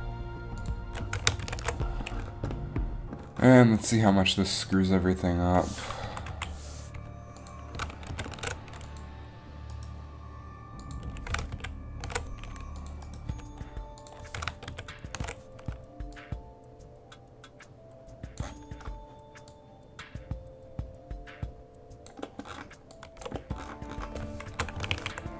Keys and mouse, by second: 1.7 ctrl+shift+v, 6.2 Right, 6.4 Left, 8.3 ctrl+shift+v, 9.8 click, 10.0 Right, 10.0 ctrl+shift+v, 11.7 ctrl+shift+v, 14.9 ctrl+shift+v, 19.6 click, 22.4 middle click, 24.6 shift+Left, 25.0 alt+a.